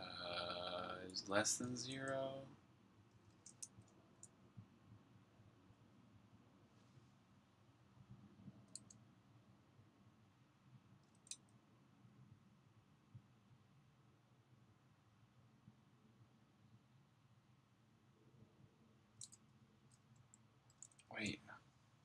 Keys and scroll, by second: 1.0-1.9 typing, 3.2 typing, 8.6 space, 11.2 c, 20.1-21.5 typing.